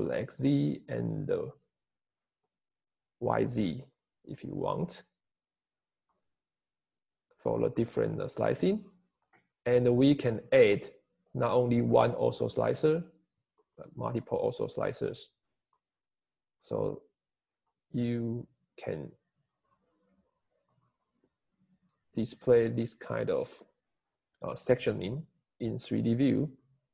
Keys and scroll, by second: 2.4 Home, 6.0 Escape, 17.6 Escape, 26.5 Escape.